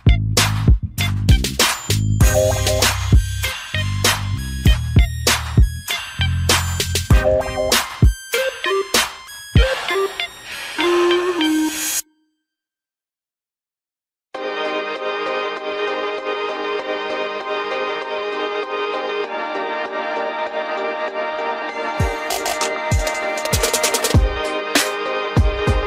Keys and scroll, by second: 14.4 ctrl+d.